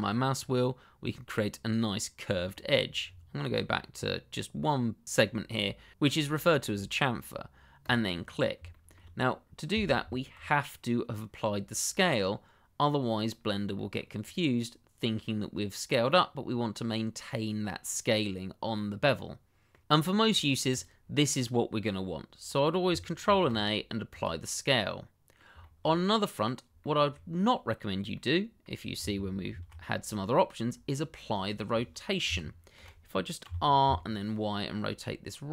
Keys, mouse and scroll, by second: 2.3-5.0 scroll down 1, 7.8 click, 8.1-8.6 scroll down 1, 8.7 shift+middle click, 10.0 Tab, 13.3-13.7 scroll down 1, 13.7 middle click, 14.2 click, 19.0 middle click, 20.7 click, 23.2 ctrl+a, 24.1 click, 24.8 middle click, 25.8 shift+middle click, 26.8 shift+middle click, 26.8 middle click, 27.0 shift+middle click, 28.1 middle click, 29.4 ctrl+a, 32.2 Escape, 33.4 r, 33.8 y.